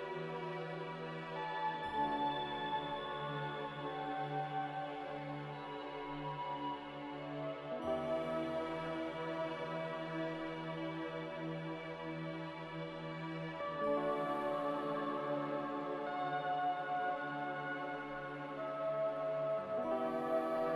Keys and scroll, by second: 8.2-10.0 typing, 12.4 typing, 13.9 a, 15.2-16.1 typing, 17.9-18.6 typing.